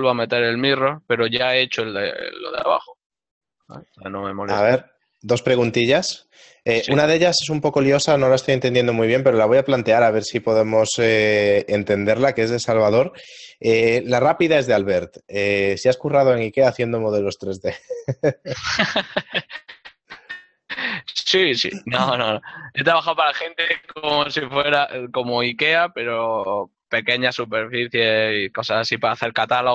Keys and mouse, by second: 4.2 ctrl+middle click, 8.1 1, 8.6 Tab, 11.4 ctrl+middle click, 14.3-15.0 typing, 16.3 ctrl+middle click, 16.9 Tab, 17.0 click, 17.3 ctrl+middle click, 18.1 middle click, 19.3 shift+middle click, 21.5 ctrl+middle click, 21.8 shift+middle click, 22.9 middle click.